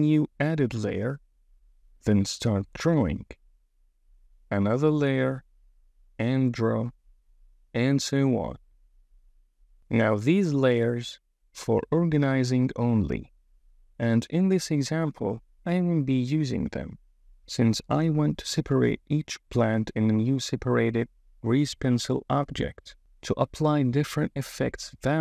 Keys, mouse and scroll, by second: 1.2 click, 4.6 click, 5.8 super+z, 10.1 KP_1, 15.6 KP_1, 15.8 super+z, 17.9 super+z, 18.2 super+z, 18.4 f, 21.2 KP_1.